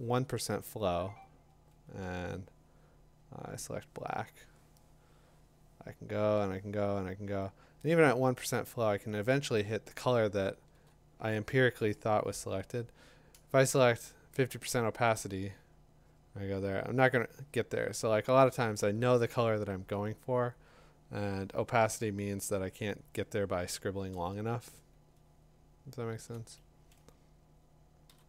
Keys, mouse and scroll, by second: 1.1 ], 3.8 click, 6.6 click, 10.6-13.8 drag, 10.7 z, 14.6 1, 15.1 5, 21.9 b, 26.3-27.9 click, 28.1 typing.